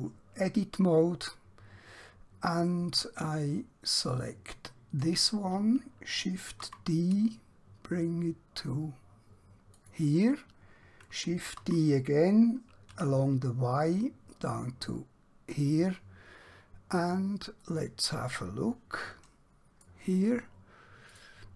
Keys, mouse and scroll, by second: 4.6 click, 9.8 click, 15.6 click, 17.7 middle click, 21.1 click.